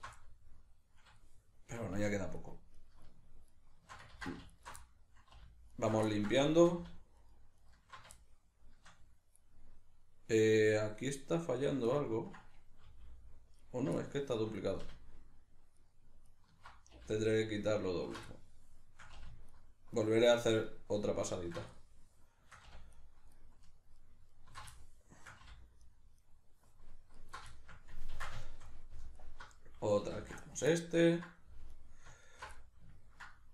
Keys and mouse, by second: 0.2-2.4 middle drag, 2.4 alt+shift+right click, 2.8 alt+shift+right click, 3.5 alt+shift+right click, 4.2 ctrl+z, 4.5 alt+shift+right click, 4.8 middle click, 5.8 alt+shift+right click, 6.1-7.2 ctrl+middle drag, 7.2 alt+shift+right click, 7.6 alt+shift+right click, 8.2-13.8 shift+middle drag, 12.9 g, 13.8 right click, 14.0-15.8 shift+middle drag, 15.8 alt+shift+right click, 16.3 alt+shift+right click, 17.2 alt+shift+right click, 17.8 alt+shift+right click, 18.3-19.5 shift+middle drag, 19.5 alt+shift+right click, 19.9 alt+shift+right click, 20.7 alt+shift+right click, 21.3 alt+shift+right click, 21.7-22.9 shift+middle drag, 22.9 alt+shift+right click, 23.3 alt+shift+right click, 23.9 alt+shift+right click, 24.3 alt+shift+right click, 24.7-25.8 shift+middle drag, 25.8 alt+shift+right click, 26.2 alt+shift+right click, 27.2 alt+shift+right click, 27.6-29.2 shift+middle drag, 28.2 ctrl+x, 29.2 alt+right click, 30.2 ctrl+x, 30.8-31.8 ctrl+middle drag, 31.8 alt+right click, 32.2 alt+shift+right click, 32.6-33.5 middle drag.